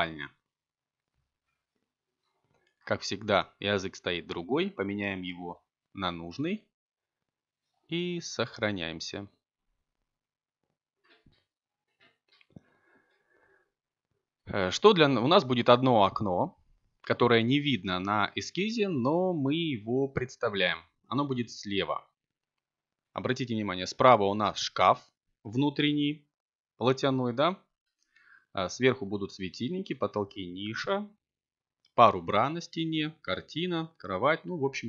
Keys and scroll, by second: 1.4 BackSpace, 2.9-4.5 typing, 5.8 Return, 14.6 a.